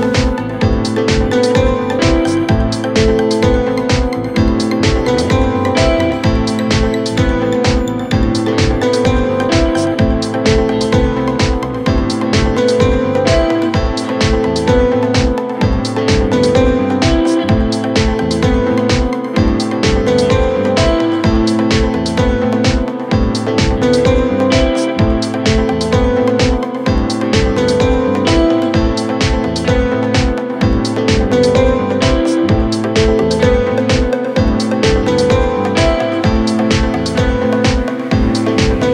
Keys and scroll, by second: 2.9 c, 3.2 shift+F2, 3.3 Escape, 8.9 shift+F2, 9.1 Escape, 9.4 F3, 16.1 c, 16.3 Escape.